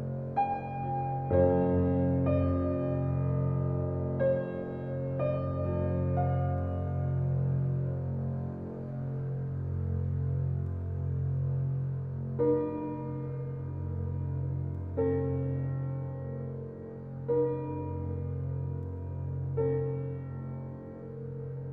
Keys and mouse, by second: 0.0-2.9 drag, 3.2 ctrl+alt+click, 3.9 ctrl+alt+click, 4.7 alt+click, 6.3-6.6 typing, 7.3 click, 8.1-8.8 typing, 9.9-13.5 drag, 14.1-16.7 typing, 15.4 alt+click, 15.8 alt+click, 16.2 alt+click, 17.0-19.1 alt+drag, 19.2 click, 20.3-21.0 typing.